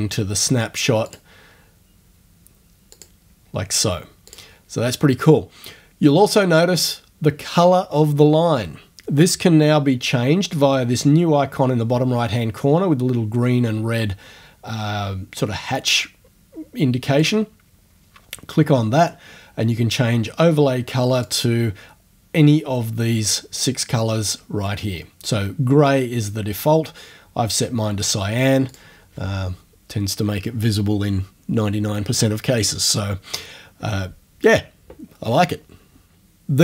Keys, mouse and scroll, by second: 1.1 click, 2.9 click, 4.3 click, 17.2 click, 21.3 click, 28.7 click.